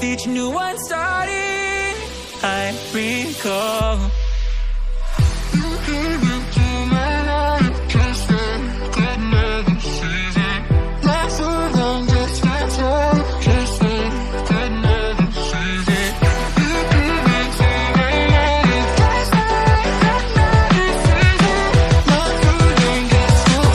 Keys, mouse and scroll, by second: 0.2 s, 2.6 KP_1, 3.0-3.6 scroll up 2, 4.0 s, 6.3 g, 8.3 KP_7, 8.6 KP_9, 9.0-9.6 scroll down 1, 9.6 s, 11.1-11.7 scroll up 1, 11.7 click, 12.0-12.7 scroll up 1, 12.7 click, 13.4 shift+d, 16.6 click, 17.1 shift+d, 21.5 scroll down 1, 21.8 click, 22.4 click.